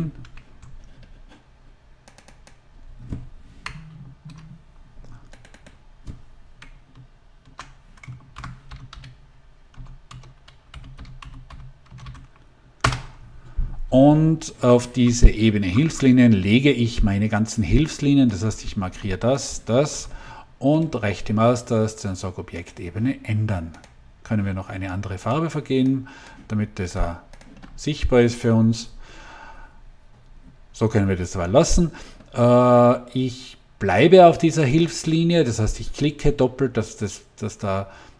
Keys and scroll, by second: 0.2 Escape, 3.6 Return, 4.3 BackSpace, 6.6 BackSpace, 8.0-12.4 typing, 12.7 Return.